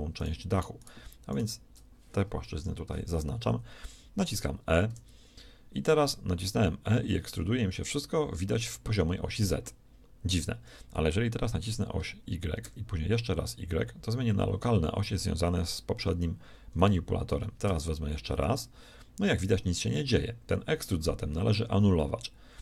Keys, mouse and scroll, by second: 2.6 ctrl+KP_3, 4.8 e.